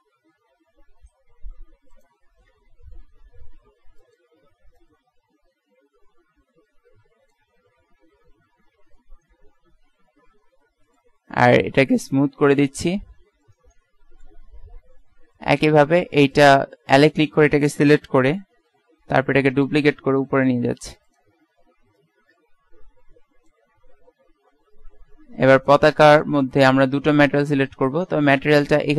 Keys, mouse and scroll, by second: 0.4 Tab, 1.1 s, 2.7 Tab, 3.5 s, 4.9-5.9 drag, 7.5 Tab, 8.2 middle click, 8.6 z, 12.5-13.9 drag, 14.9 KP_1, 16.1 Tab, 16.4 right click, 18.3 l, 20.8 shift+d, 25.0 Tab.